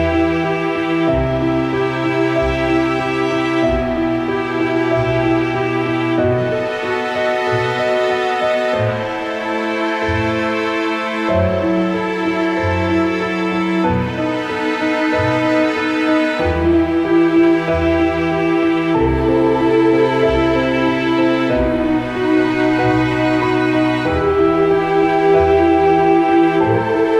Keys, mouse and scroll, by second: 0.3 click, 1.3 ctrl+v, 2.1 Up, 2.5 Up, 2.9-5.0 drag, 5.0 Up, 5.5 Up, 6.1 Down, 6.4 Up, 7.7 click, 8.5 ctrl+a, 8.8 ctrl+c, 9.2 click, 10.4 v, 11.0 ctrl+v, 11.4 ctrl+z, 11.9 click, 12.5 ctrl+c, 12.9 click, 13.4 ctrl+v, 15.2 click, 16.5 click, 17.7 ctrl+a, 18.1 ctrl+c, 18.4 click, 18.8 ctrl+v, 19.7 ctrl+t, 20.5-22.3 drag, 22.2 Return, 22.5 Left, 23.4 click, 24.9 ctrl+a, 25.3 ctrl+c, 25.7 click, 26.5 ctrl+v.